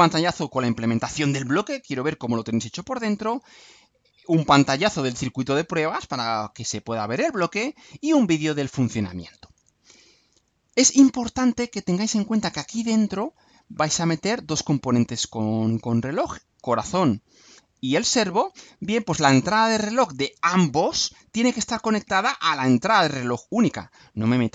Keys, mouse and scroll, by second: 10.2 scroll down 2, 11.4 scroll up 2.